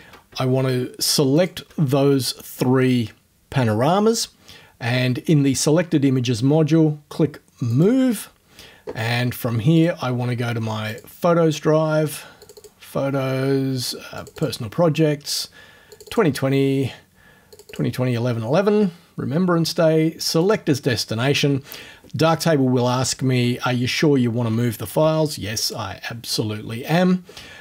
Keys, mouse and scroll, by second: 1.4 shift+click, 7.7 click, 9.8 click, 10.9 click, 12.4 click, 14.2 click, 16.0 click, 17.6 click, 20.4 click, 25.6 click.